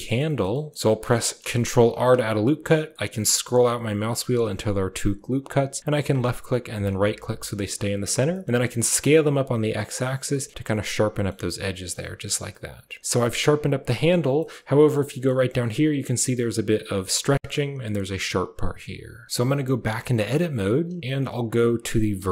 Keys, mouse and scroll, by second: 0.2 click, 0.4 shift+click, 1.1 shift+click, 1.8 ctrl+r, 8.1 s, 11.0 s, 11.9 Tab, 12.4-13.0 middle drag, 13.1 middle drag, 13.8 middle click, 14.3 middle drag, 14.6 shift+drag, 15.0 drag, 15.3 shift+click, 17.2 shift+middle drag, 19.2 shift+middle click, 19.4 Tab, 19.8 shift+middle click, 22.0 1.